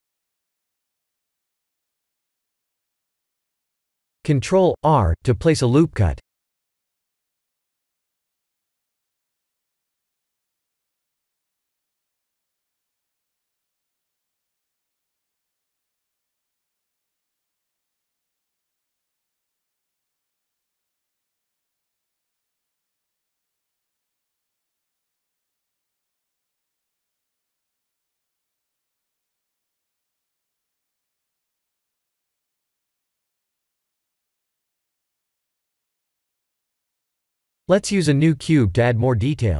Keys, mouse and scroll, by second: 0.7 KP_1, 2.0 click, 4.6-5.0 scroll up 4, 5.2 shift+middle click, 6.2 Tab, 6.9 ctrl+r, 7.9 click, 8.3 b, 9.1 g, 10.4 click, 10.9 b, 11.5 g, 12.5 click, 15.5 shift+middle click, 17.8 ctrl+r, 19.6 click, 20.0 b, 21.3 g, 24.0 Tab, 24.7-25.3 scroll down 4, 25.5 shift+middle click, 27.5 shift+middle click, 28.2-30.1 scroll up 3, 30.1-30.4 scroll down 3, 30.5 shift+middle click, 31.6 middle click, 35.9 KP_1, 36.8 click, 38.2 shift+a.